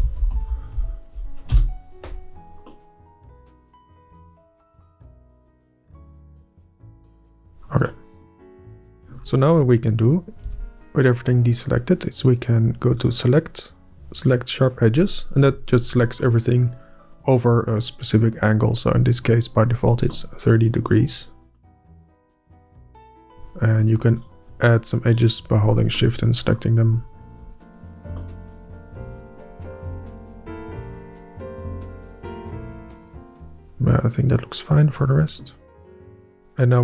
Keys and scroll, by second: 0.3 Up, 0.5 Up, 0.7 e, 1.3 Up, 2.1 Up, 8.3 Up, 9.2 Up, 9.7 Up, 10.4 alt+Up, 11.0 Up, 24.0 shift+Up, 27.1 shift+Up, 27.8 Up.